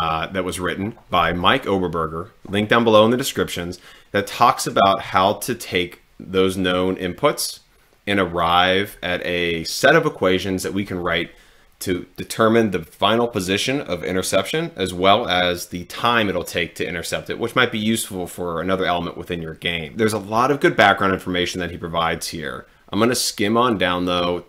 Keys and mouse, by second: 20.1-24.4 drag.